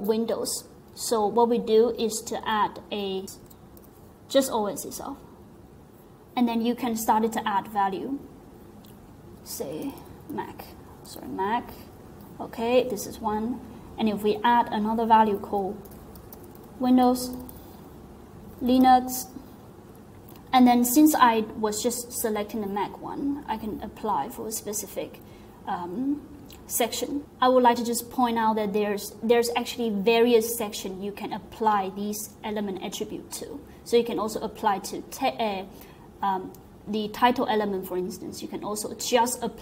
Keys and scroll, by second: 3.1-4.3 typing, 9.5-11.6 typing, 15.5-19.5 typing.